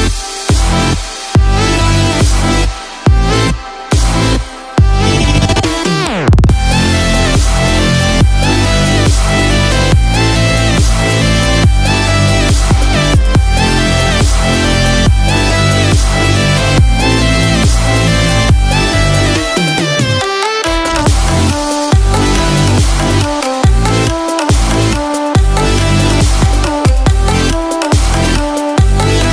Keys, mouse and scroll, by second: 6.3 click, 15.8 click, 17.6 click.